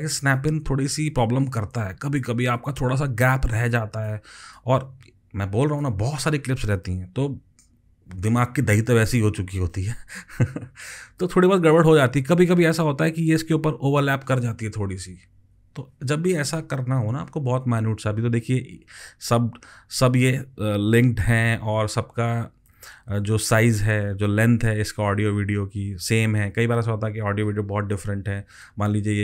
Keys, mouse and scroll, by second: 16.0 ctrl+z, 28.8 alt+click.